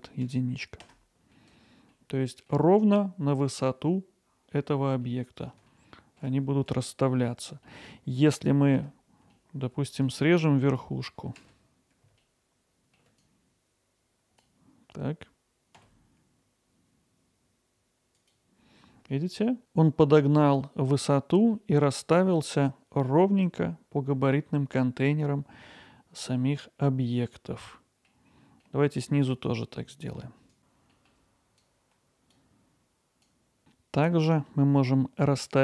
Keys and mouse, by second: 8.4 click, 8.8 Tab, 10.0-11.3 drag, 11.5 alt+z, 13.3-14.4 drag, 15.8 x, 25.8 middle click, 30.6 KP_1, 31.0 click, 31.5-32.8 drag, 32.8 x.